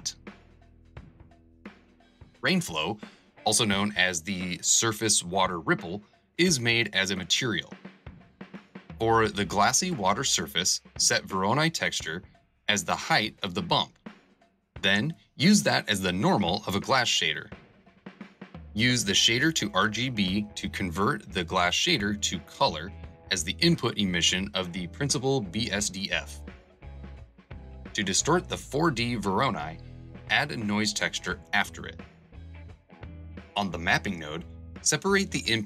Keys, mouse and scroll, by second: 0.4 Return, 1.2 BackSpace, 1.6 shift+c.